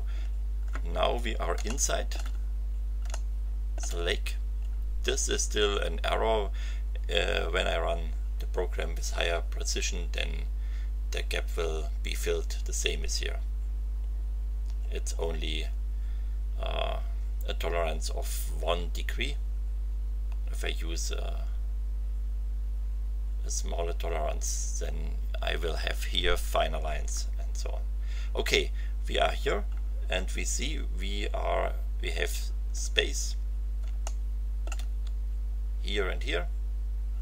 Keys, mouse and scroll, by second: 0.4-0.7 scroll up 2, 1.6 shift+middle click, 2.4-2.8 shift+scroll up 1, 3.1 shift+middle click, 32.5-32.9 scroll up 2, 34.0 shift+middle click, 34.0 shift+click.